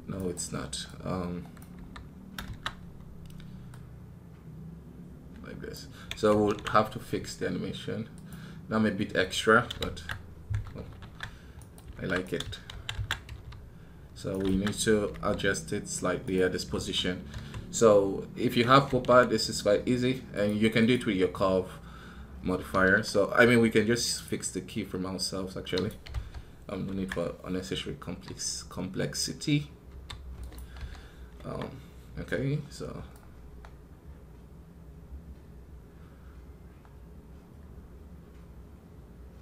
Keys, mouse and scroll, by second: 0.0 right click, 11.4 right click.